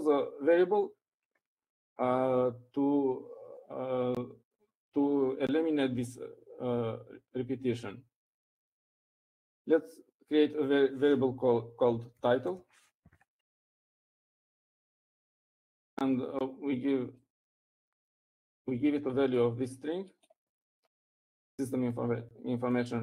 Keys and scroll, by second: 0.8 Up, 11.2 typing, 13.6-16.7 typing.